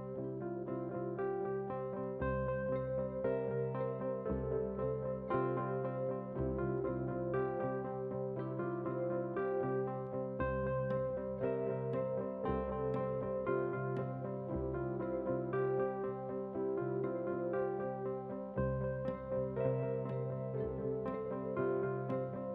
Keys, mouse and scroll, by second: 0.0 click, 0.3 middle click, 1.1 scroll up 1, 1.3 middle click, 1.6 shift+middle click, 1.9 scroll down 1, 2.1 middle click, 2.9 click, 4.1 g, 5.1 middle drag, 5.4 shift+middle click, 5.7 shift+middle click, 6.1 s, 7.9 KP_1, 8.2 scroll up 3, 8.4 shift+middle click, 8.8 shift+middle drag, 9.9 g, 11.9 KP_3, 12.1 scroll down 1, 12.3 shift+middle click, 12.6 g, 14.4 KP_1, 14.8 g, 15.6 KP_3, 15.9 g, 16.9 middle click, 17.1 shift+middle click, 17.7 click, 18.2 KP_1, 18.5 scroll up 4, 18.7 shift+middle click, 18.9 middle click, 19.3 click, 19.8 KP_1, 20.1 shift+middle click, 21.7 e.